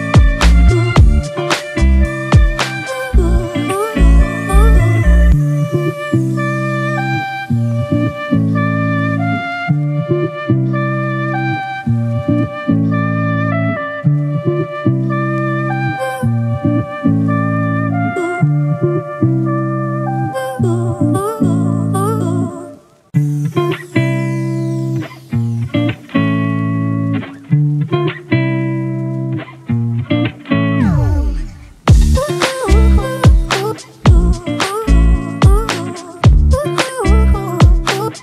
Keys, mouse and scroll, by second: 1.9 Return, 3.0 Right, 5.2 Left, 28.2-30.0 typing.